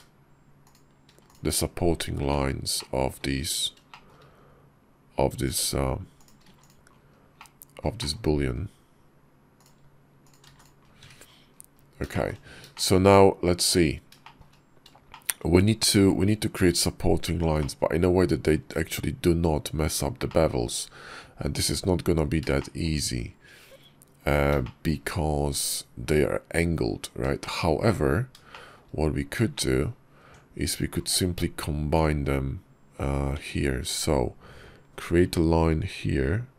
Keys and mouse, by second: 1.0 x, 1.7 middle click, 2.1 `, 2.6 click, 3.7 shift+click, 6.6 x, 7.2 click, 7.8 shift+click, 10.1 shift+click, 10.6 x, 11.0 middle click, 12.0 shift+click, 12.6 shift+click, 13.0 KP_5, 14.1 shift+click, 14.9 shift+click, 17.4 click, 18.6 `, 20.1 shift+click, 22.4 shift+click, 24.5 shift+click, 27.3 shift+click, 28.3 shift+click, 29.4 shift+middle click, 30.1 Tab, 32.0 KP_5, 33.2 Tab, 35.1 k.